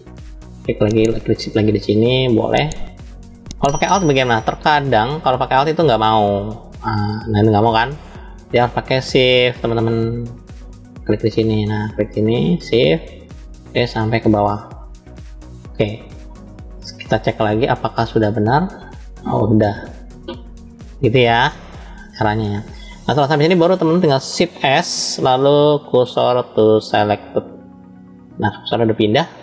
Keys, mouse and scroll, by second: 0.0 middle click, 0.6 middle click, 2.4 shift+click, 3.9-5.1 middle drag, 5.3 click, 6.4 alt+click, 7.8 middle click, 9.0 shift+click, 9.8-11.5 middle drag, 12.5 shift+click, 13.3-14.4 middle drag, 15.3 shift+click, 16.1-17.1 middle drag, 18.1 click, 18.9-21.6 middle drag, 22.4-23.9 middle drag, 22.4 click, 24.5 shift+s.